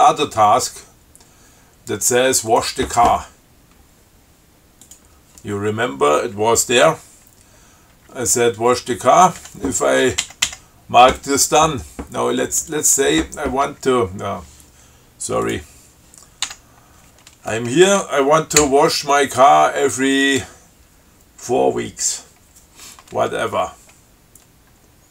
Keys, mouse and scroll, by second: 0.4-0.8 scroll down 2, 1.3 scroll up 2, 2.8 click, 5.1 click, 8.2 Down, 9.7 Up, 12.8 click, 15.7 click, 16.7 q, 18.0 space.